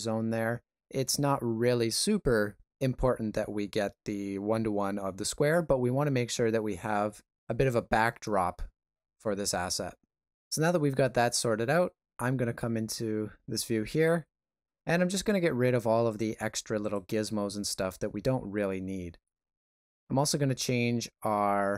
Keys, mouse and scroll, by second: 12.9 middle click, 16.1 click, 16.8 click, 20.8 middle click.